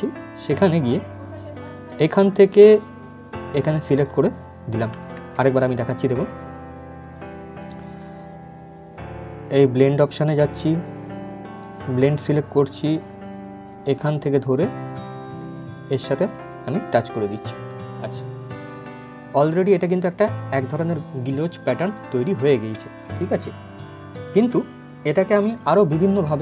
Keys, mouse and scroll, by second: 1.6-4.9 drag, 4.9 ctrl+z, 6.8-17.6 drag, 17.6 click.